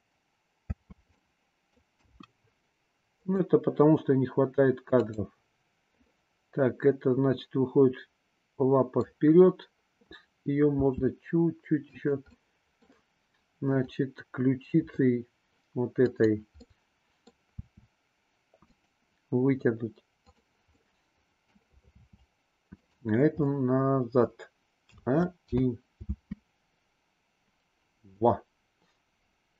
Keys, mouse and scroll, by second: 0.7 space, 1.1-1.7 middle drag, 1.9 KP_1, 3.3 click, 4.9 click, 5.9-9.1 middle drag, 10.7 r, 12.3-12.8 middle drag, 13.6 click, 16.0-16.7 drag, 16.7-17.3 middle drag, 17.6 r, 20.2 click, 20.8-21.5 middle drag, 21.9 r, 23.5-24.3 middle drag, 24.8 a, 25.5 i, 25.9 space, 28.2-29.5 middle drag.